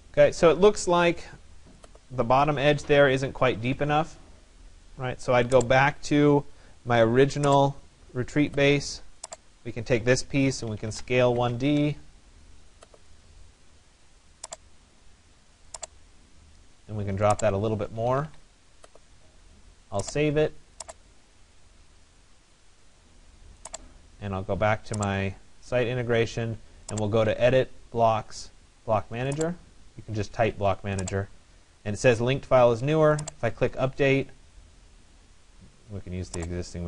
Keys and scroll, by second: 11.4 Return, 17.7 Escape.